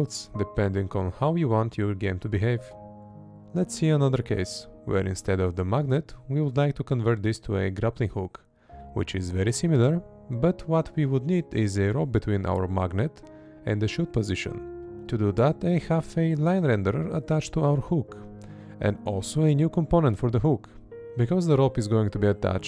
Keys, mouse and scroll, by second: 2.2 space, 3.8 space, 7.2 Right, 8.5 space, 8.9 Left, 11.3 space, 12.4 Up, 13.1 Down, 14.3-17.6 drag, 15.3 Down, 15.7 Right, 17.1 space, 17.6 Left, 19.4 space.